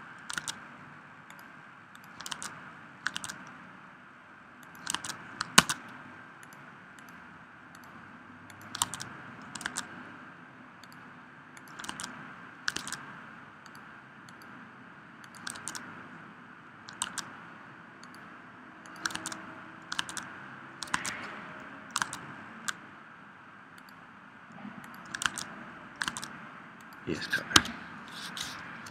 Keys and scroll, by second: 0.3 super+Tab, 2.3 super+Tab, 3.2 super+Tab, 5.0 super+Tab, 5.5 super+Tab, 8.8 super+Tab, 9.7 super+Tab, 11.9 super+Tab, 12.7 super+Tab, 15.5 super+Tab, 17.1 super+Tab, 19.1 super+Tab, 20.0 super+Tab, 21.0 super+Tab, 22.0 super+Tab, 25.3 super+Tab, 26.1 super+Tab, 27.7 Escape, 28.5 Escape.